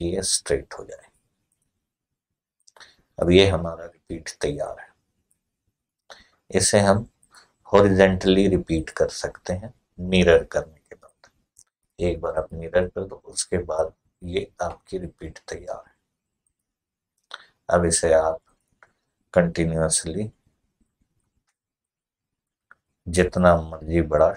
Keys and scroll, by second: 20.1 ctrl+r, 20.6 ctrl+r, 21.0 ctrl+r.